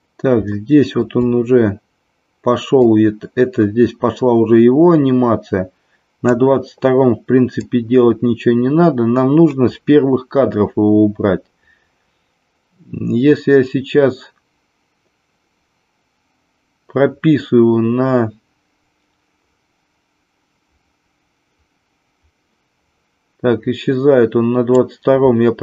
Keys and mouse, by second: 0.5 shift+middle click, 2.9-6.4 drag, 7.7-24.7 drag.